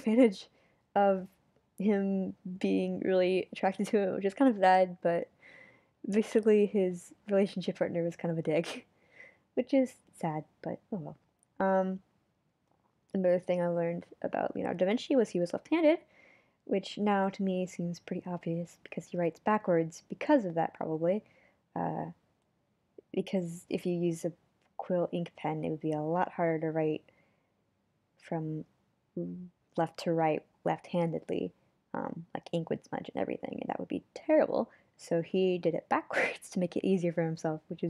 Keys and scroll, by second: 5.6 super+z, 6.3 super+z, 6.8 super+z, 8.0 super+z, 8.7 super+z.